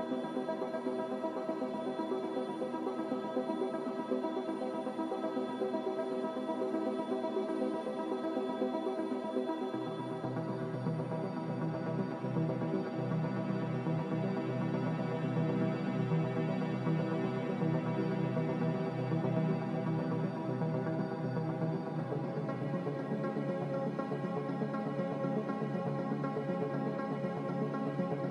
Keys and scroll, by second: 4.1 3, 7.0 g, 12.0 n, 15.5 b, 18.2 Delete, 22.2 n, 24.2 b.